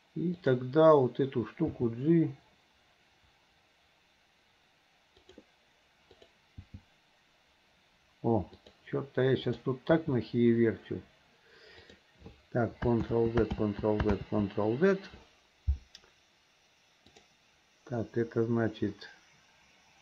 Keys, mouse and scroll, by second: 0.4 click, 1.7 g, 6.2 click, 6.6 g, 9.5 click, 11.9 g, 13.1 ctrl+z, 13.6 ctrl+z, 14.2 ctrl+z, 17.1 click.